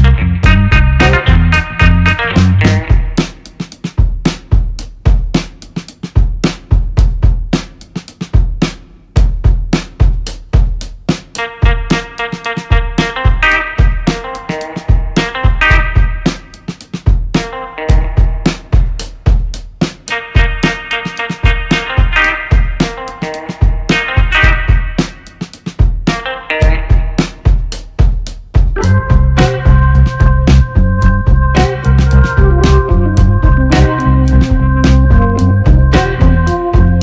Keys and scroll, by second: 3.5 2, 3.9 Return, 3.9 4, 17.3 Delete, 32.7 l, 33.6 BackSpace, 33.8 o, 34.0 k, 34.2 Return.